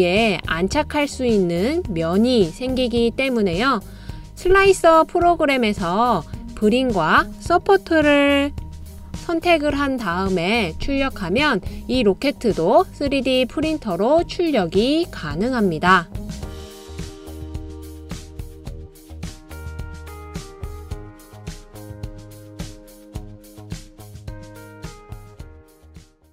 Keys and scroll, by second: 8.7 d.